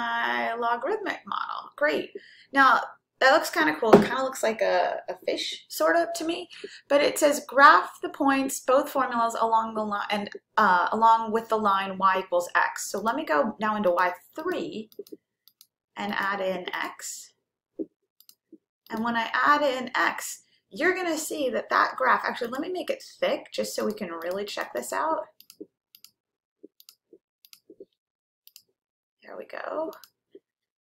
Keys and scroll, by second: 14.0 Down, 14.5 Down, 15.0 Down, 15.6 Down, 16.8 Down, 18.4-19.1 typing, 20.6-21.3 typing, 23.9 Down, 24.4 Down, 25.1 Down, 26.0 Down, 27.1 Left, 27.7 Left, 28.5-29.3 typing, 30.0 F5.